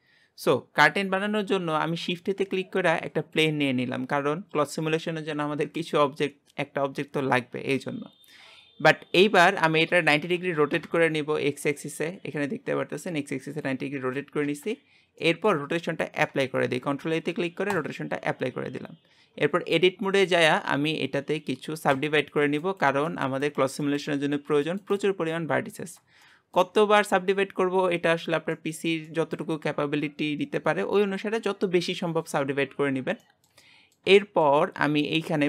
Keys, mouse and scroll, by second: 0.0-1.4 scroll down 2, 3.3 shift+a, 4.0 scroll up 2, 9.9 r, 15.0 scroll down 1, 15.2-17.8 middle drag, 17.8 ctrl+a, 19.3 Tab, 19.6-21.0 scroll up 2, 21.0-22.1 scroll up 1, 22.1-26.3 right drag, 26.3-34.6 shift+middle drag, 34.6-35.1 scroll up 1, 35.1 shift+middle click.